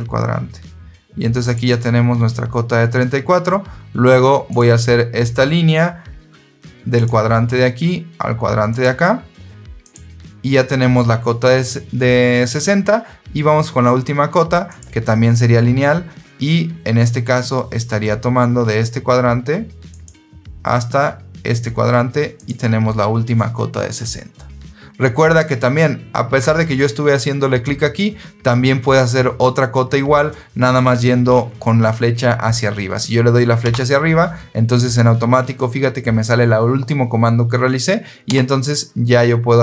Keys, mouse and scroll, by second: 1.4 click, 4.4 click, 6.8 click, 8.6 click, 9.7 click, 14.6 click, 19.8 click, 21.4 click, 22.2 click, 33.5 Up, 38.2 Return.